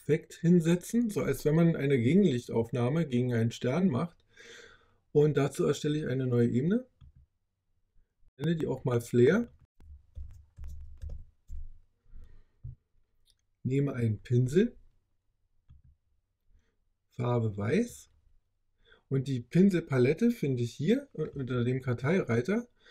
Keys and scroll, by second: 9.8-11.5 typing.